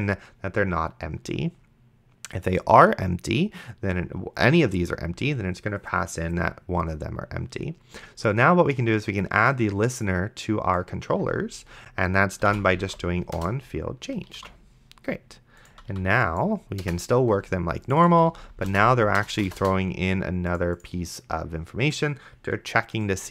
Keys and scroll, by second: 12.7 shift+o, 13.1 n, 13.4 Return, 14.6 ctrl+s, 15.7 d, 16.8 BackSpace, 18.1 d, 18.7 BackSpace.